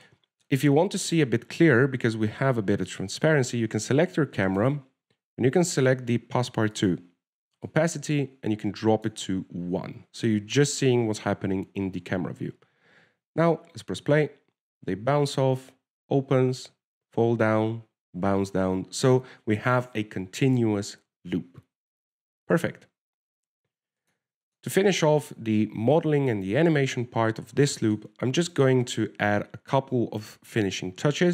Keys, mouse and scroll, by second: 1.3 shift+middle click, 2.3 right click, 5.8 click, 7.4-8.1 scroll down 3, 8.1 click, 9.0 click, 10.4 ctrl+w, 11.0-12.0 scroll up 2, 13.4 alt+a, 14.0 w, 23.6-24.0 scroll down 4, 25.3 click, 25.7 click, 26.2 middle click, 28.1-28.7 scroll down 1, 29.0 shift+middle click, 29.8 right click, 30.1 shift+middle click, 31.1 w.